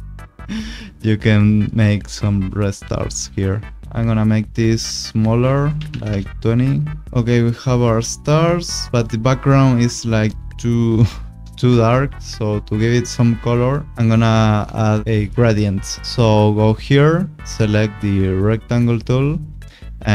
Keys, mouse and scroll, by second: 2.9 click, 4.0 click, 5.7 2, 5.9 0, 6.0 Return, 7.0 click, 13.9 click, 17.1 click.